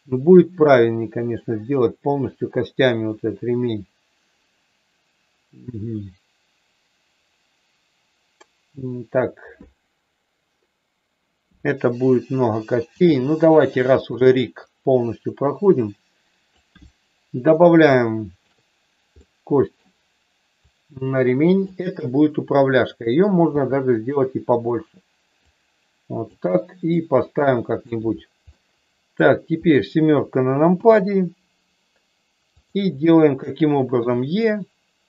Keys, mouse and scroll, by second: 12.9 s, 14.6-16.5 drag, 17.9 shift+middle click, 19.2 middle click, 20.6-21.6 drag, 23.5 s, 24.5 click, 25.5 click, 27.0 click, 28.4 middle click, 30.7 KP_7, 32.6 click, 34.0 e.